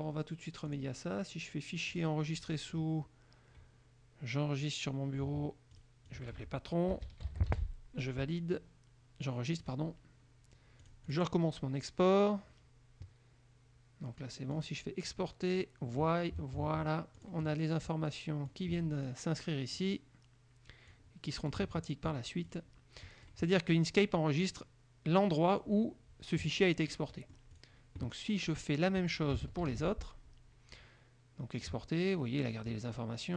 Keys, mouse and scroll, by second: 0.8 click, 2.0 click, 5.9 click, 6.2 click, 6.8-8.2 typing, 9.8 click, 11.0 click, 14.6 click, 17.3 click, 18.6 click, 21.1 click, 22.6 click, 24.6 click, 27.1 middle click, 27.7 click, 29.8 ctrl+shift+e.